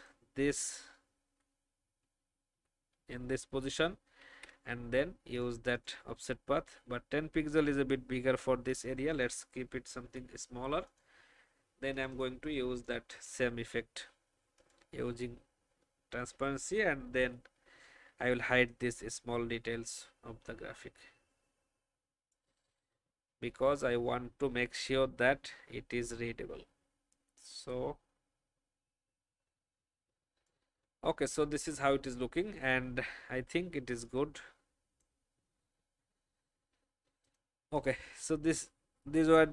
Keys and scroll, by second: 2.1 Down, 2.5 Down, 4.2 ctrl+alt+f, 10.0 ctrl+x, 13.2 ctrl+f, 17.1 n, 36.6 alt+v.